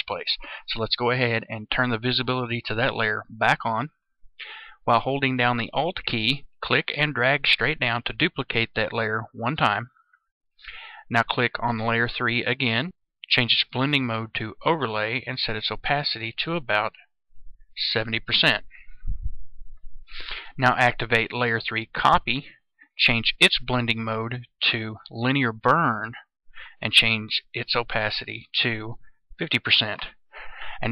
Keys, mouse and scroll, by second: 6.7-8.1 alt+drag, 12.3 click, 17.9 KP_0, 21.9-29.2 drag, 29.2 KP_0.